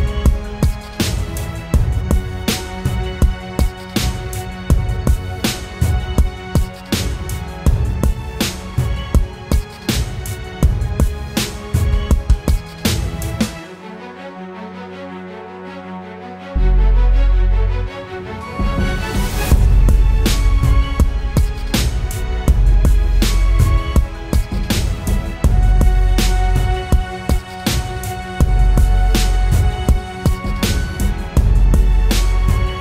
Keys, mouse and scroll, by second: 17.2 double click, 26.7 double click, 27.8-28.9 typing.